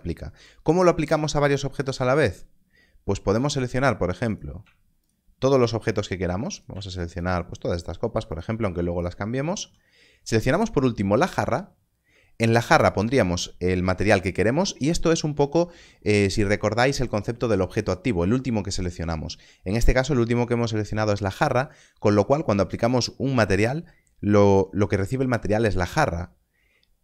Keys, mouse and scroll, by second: 4.2 click, 4.4 click, 5.0 shift+click, 7.2 shift+click, 8.3 shift+click.